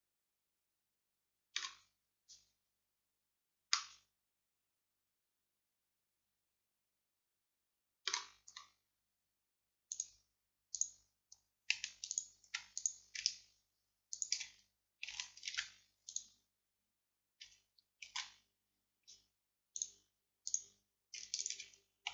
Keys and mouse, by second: 10.0 click, 10.8-15.6 middle drag, 15.6 alt+m, 18.1 ctrl+z, 19.8-21.6 middle drag.